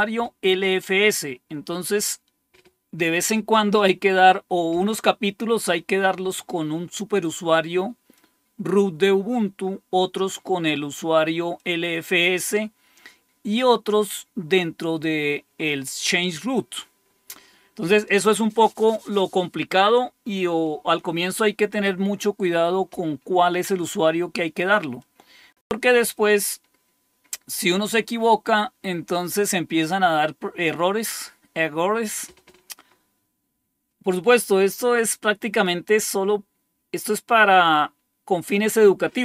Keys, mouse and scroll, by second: 8.1 click, 9.3 click, 11.5 click, 13.0-24.9 scroll up 2, 24.9-27.4 drag, 30.9 click.